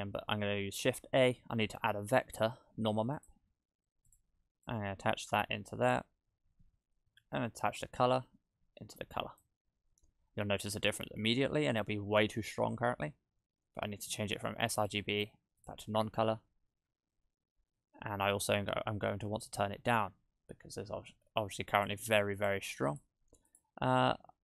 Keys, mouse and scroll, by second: 0.8 shift+a, 4.7 click, 6.4 click, 7.6 click, 10.7 click, 14.8 click, 16.9 click, 17.6-18.4 scroll up 3, 18.4-19.0 scroll up 2, 21.8 click, 22.4 click, 22.9 click, 23.5 click.